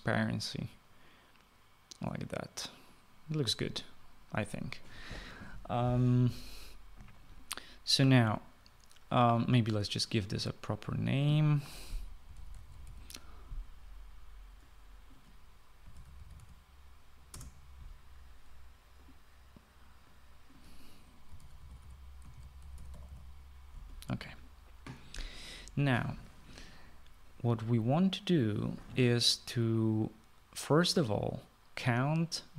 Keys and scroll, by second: 13.0-14.3 typing, 16.5-17.8 typing, 18.2 Return, 22.0-24.5 typing.